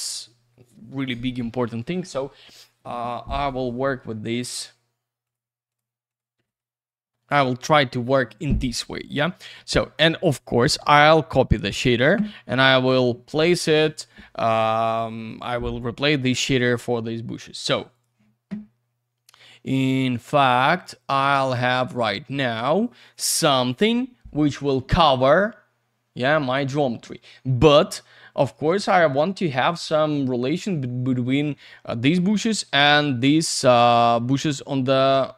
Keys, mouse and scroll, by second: 4.4 ctrl+click, 5.2 ctrl+click, 5.7 ctrl+click, 6.1 ctrl+click, 6.1 ctrl+double click, 6.6 F3, 8.9 middle click, 9.8 middle click, 10.1-10.6 scroll down 1, 11.0 shift+click, 12.7 click, 17.9 click, 19.2 click, 27.6-28.2 scroll up 1, 28.2-29.5 scroll down 1.